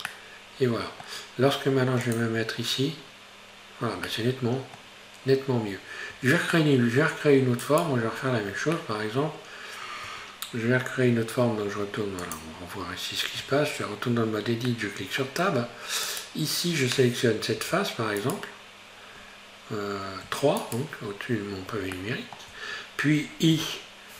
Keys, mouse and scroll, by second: 0.1-2.1 middle drag, 2.1 click, 4.1-6.2 middle drag, 6.2 Tab, 6.5-7.7 middle drag, 7.7 right click, 8.3-8.8 scroll down 4, 8.8-10.1 middle drag, 10.1 Tab, 12.3 click, 13.5 Tab, 14.7 middle click, 15.6-16.1 scroll up 2, 16.1 right click, 17.6 a, 18.2 right click, 20.3 3, 20.7 right click, 21.1-22.0 scroll down 3, 22.0-23.6 shift+middle drag.